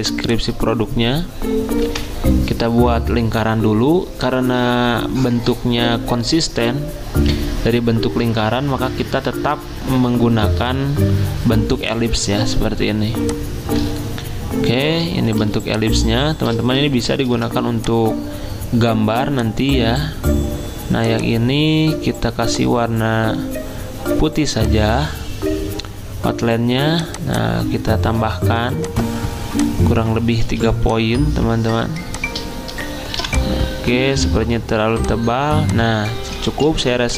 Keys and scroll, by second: 15.4 z, 17.3 v, 30.5 z, 32.0 m.